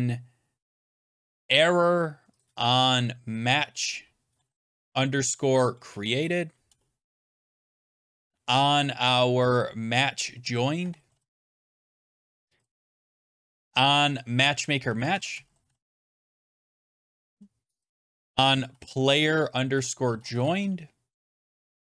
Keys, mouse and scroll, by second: 0.6-1.8 typing, 2.3 click, 2.6 click, 2.7 click, 4.1-7.9 typing, 8.1 click, 8.1 click, 10.4-12.5 typing, 12.6 click, 12.8 click, 13.4 click, 13.4 click, 14.5-21.0 typing, 17.8 click, 17.9 click, 21.2 click, 21.3 click.